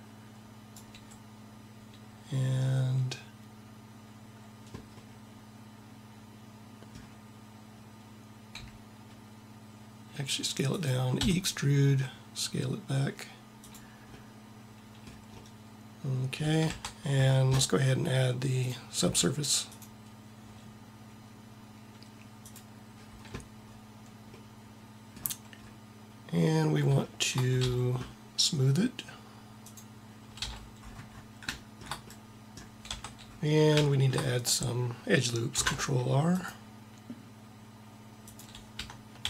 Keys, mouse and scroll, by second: 8.5 s, 11.2 e, 14.2-15.3 middle drag, 16.6 Tab, 23.0 middle click, 27.7 t, 30.2 t, 30.9 middle click, 32.9 Tab, 35.4 ctrl+r, 39.1 ctrl+r.